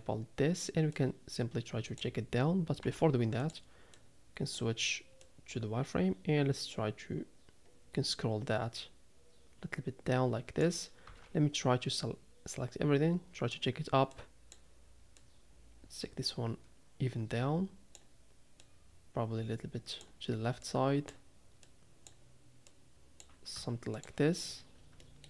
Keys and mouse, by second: 1.0 click, 2.8 z, 4.1 click, 5.2-10.6 drag, 11.0 a, 12.0-13.5 drag, 14.3 click, 15.2-18.0 drag, 18.7-20.1 drag, 20.6 click, 21.8 click, 22.8 click, 23.5 z, 25.1 shift+middle click.